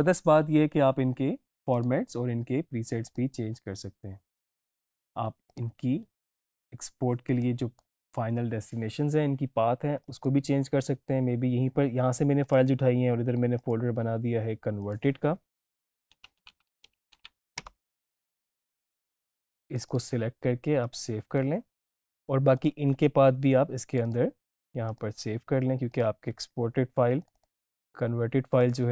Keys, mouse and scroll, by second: 1.6 click, 7.5-10.0 drag, 12.6 right click, 13.5 click, 15.3-17.6 typing, 19.7 click.